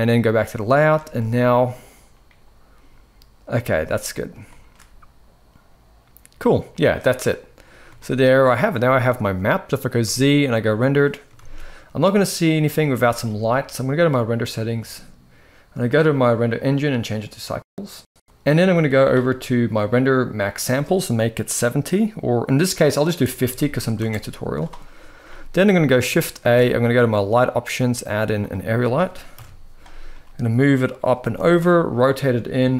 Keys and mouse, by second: 0.8 space, 3.4 space, 4.2 shift+middle drag, 7.7 shift+middle drag, 8.7-9.7 middle drag, 9.7 z, 11.3 ctrl+s, 12.7 shift+middle click, 13.9 click, 16.3-17.2 drag, 20.3-23.7 drag, 26.1 shift+a, 29.0 KP_1, 29.8 g, 30.9 r, 32.4 click.